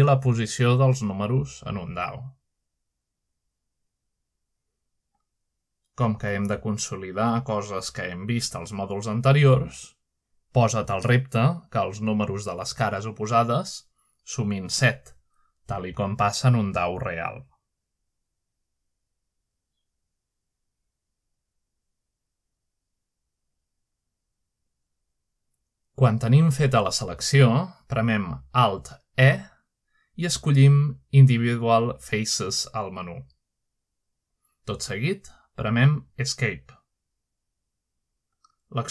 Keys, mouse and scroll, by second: 0.0 F3, 1.5 Escape, 2.9 3, 3.5 middle click, 4.3 shift+click, 4.8 shift+click, 5.3 shift+click, 5.8 shift+click, 6.4 shift+click, 8.1-9.2 shift+middle drag, 8.6-10.1 drag, 11.5 shift+middle click, 12.0 click, 13.0 shift+middle click, 13.7 shift+click, 14.3 shift+click, 15.1 shift+middle click, 15.6-17.8 shift+drag, 22.1 shift+middle click, 22.6 shift+click, 23.6 shift+middle click, 24.1-27.1 drag, 30.0 alt+middle click, 31.1 middle click, 31.6 alt+e, 37.0 click, 38.7 Escape.